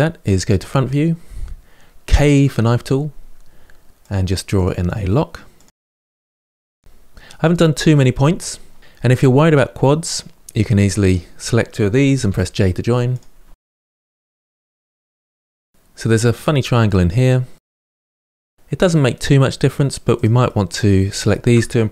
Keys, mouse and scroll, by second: 0.4 KP_1, 1.9 k, 6.7-8.2 scroll up 3, 10.4 click, 11.0-15.4 typing, 11.5 shift+click, 12.1 click, 12.3 shift+click, 12.9 click, 14.1 shift+click, 15.0 shift+click, 15.7 scroll up 1, 17.7-19.9 middle drag, 19.9 click, 20.2 middle click, 21.0 shift+click.